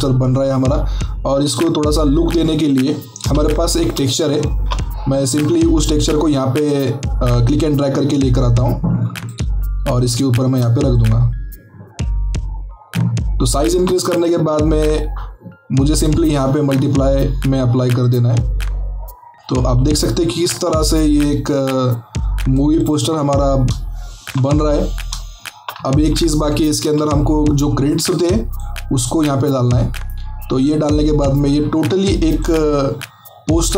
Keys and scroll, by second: 3.2 alt+Tab, 3.9 alt+Tab, 26.8 alt+Tab.